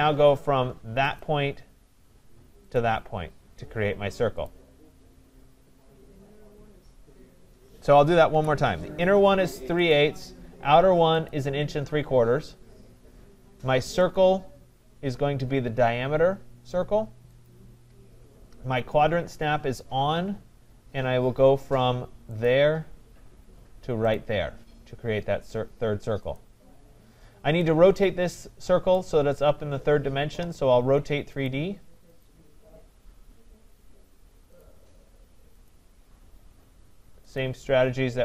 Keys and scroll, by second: 8.2 Delete.